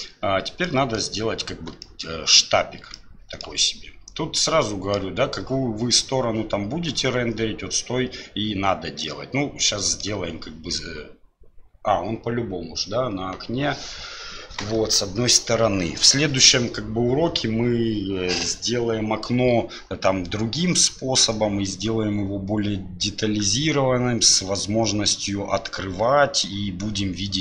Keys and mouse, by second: 0.8 middle click, 1.9 shift+middle click, 3.1 shift+middle click, 3.6-5.0 middle drag, 9.2 middle click, 26.6-27.4 middle drag.